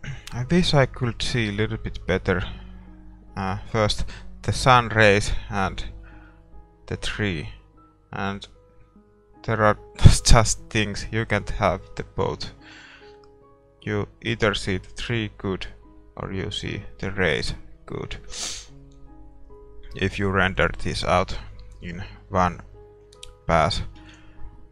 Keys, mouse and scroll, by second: 0.0-3.2 middle drag, 3.2-3.6 scroll up 1, 3.6-6.2 middle drag, 8.7-10.3 drag, 11.6-13.3 drag, 22.6 middle click, 22.9-23.3 scroll down 1, 23.3-24.7 middle drag, 23.7-24.7 drag, 24.1 ctrl+s.